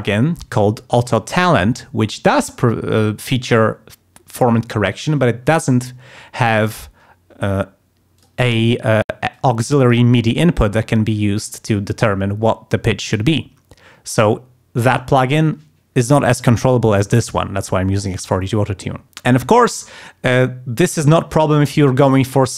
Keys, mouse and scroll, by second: 8.2 click, 9.2 click.